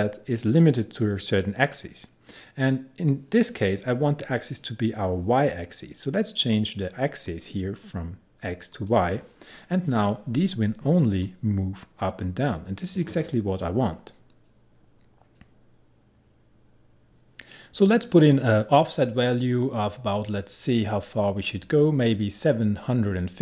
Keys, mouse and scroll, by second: 11.3-17.1 drag.